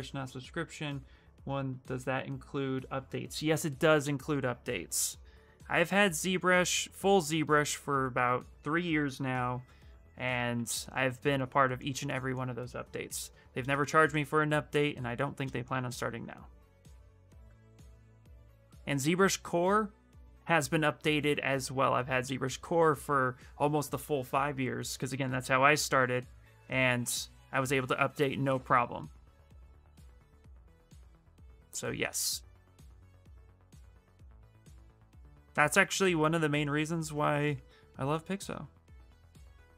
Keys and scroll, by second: 6.1 s, 16.4 w, 32.9-33.8 typing, 35.6 ctrl+z.